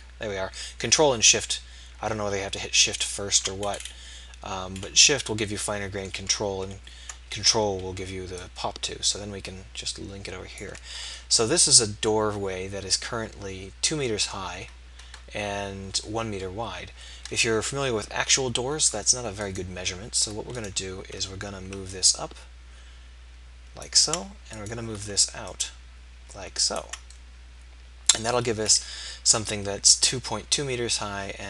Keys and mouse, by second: 7.9-11.3 middle drag, 17.8 KP_3, 19.4-21.1 drag, 21.5-23.8 right drag, 24.6 middle click.